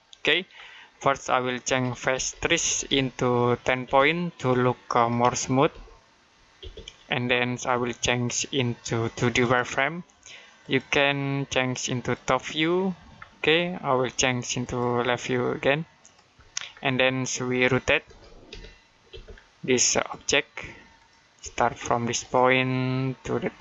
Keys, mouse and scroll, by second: 0.4-1.6 scroll up 1, 1.3-3.7 typing, 4.9-6.4 typing, 8.1 click, 9.4 click, 13.0-13.4 scroll down 1, 14.5 click, 16.6-17.1 scroll down 1, 17.1 middle click, 17.9-18.9 typing, 19.8 click, 21.2 space, 22.0 click.